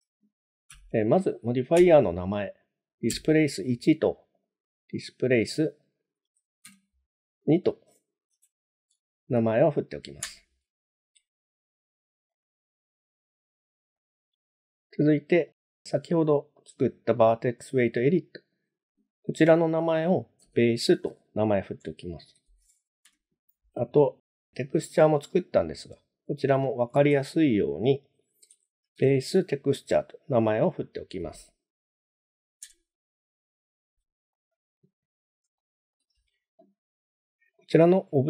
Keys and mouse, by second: 4.4-11.2 drag, 12.4 click, 14.0 click, 15.4 click, 18.6-23.5 drag, 25.3-33.7 drag, 34.4 middle click, 35.6-35.9 shift+middle drag, 37.6 click.